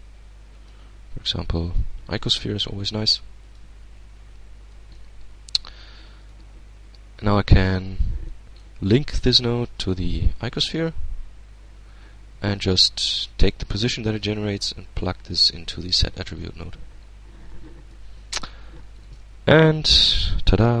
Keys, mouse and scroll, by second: 0.0 click, 1.1 click, 2.1 g, 2.9 click, 4.2 middle click, 4.5 g, 5.1 click, 5.7 right click, 6.7-7.4 drag, 7.1 Tab, 7.8 middle click, 8.8 click, 10.0 click, 11.9-14.9 drag, 15.3-16.3 middle drag, 17.2 Tab, 17.8 shift+Tab, 18.5 alt+shift+a, 19.1-19.6 alt+shift+scroll up 2, 19.6-20.8 alt+shift+middle drag.